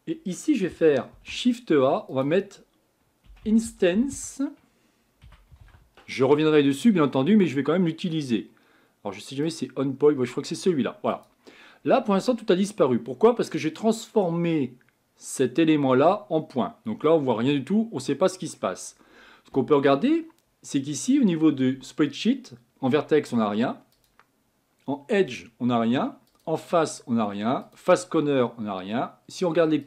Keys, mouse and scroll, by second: 17.0-29.8 middle drag.